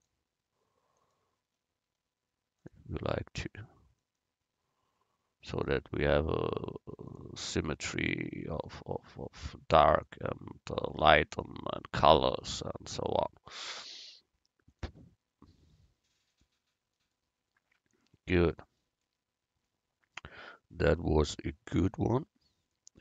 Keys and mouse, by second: 4.1-7.5 right drag, 5.6-7.5 drag, 8.8-11.9 right drag, 10.2-11.9 drag, 13.6-16.7 right drag, 14.8-16.7 drag.